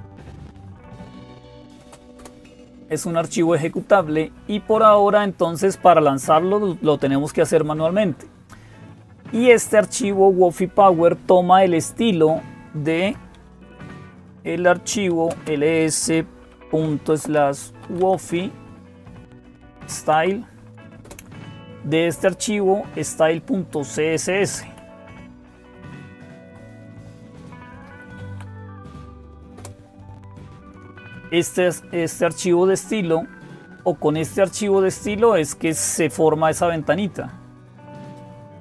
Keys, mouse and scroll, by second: 0.0-38.6 typing, 2.0 Return, 24.3 Up, 24.6 Left, 25.3 Left, 25.3-26.3 Left, 28.8 Delete, 29.4 Return, 32.5-34.6 scroll up 1, 34.6-36.9 scroll down 2, 36.9-37.4 scroll down 1, 37.4-38.6 scroll down 1.